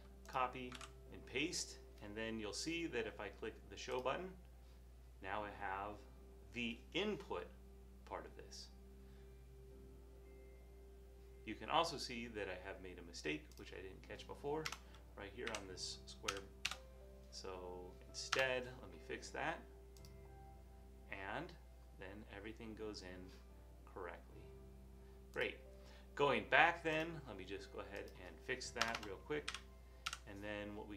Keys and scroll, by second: 1.0 super+v, 14.8 BackSpace, 15.5 Right, 16.3 ], 18.6 BackSpace, 28.9 BackSpace, 29.0 BackSpace, 29.5 7.